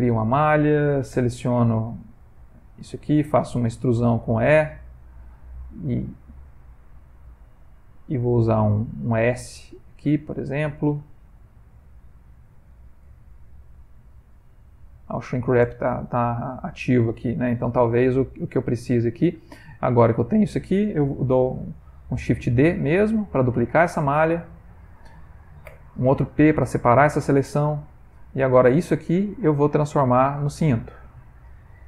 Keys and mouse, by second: 1.5 3, 1.7 alt+click, 2.4 middle click, 3.8 e, 5.6 s, 7.7 middle click, 9.1 middle click, 10.7 s, 13.3 ctrl+middle click, 13.8 shift+middle click, 14.6 middle click, 16.4 shift+middle click, 18.1 ctrl+z, 19.3 middle click, 20.2 ctrl+middle click, 23.0 shift+d, 25.6 p, 27.8 Tab, 28.1 middle click, 30.1 click, 30.4 click.